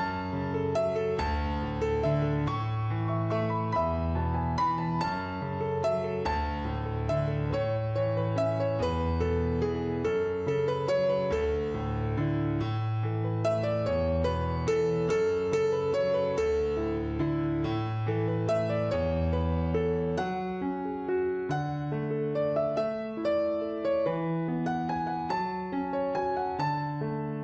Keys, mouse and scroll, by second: 0.0 click, 0.4 0, 0.8 Tab, 1.2 click, 2.7 click, 3.7 click, 5.3 w, 5.6 click, 13.4 w, 13.7 click, 19.3 click, 20.4 click, 23.2 w, 23.5 click, 26.5 4, 26.7 Return, 27.1 click.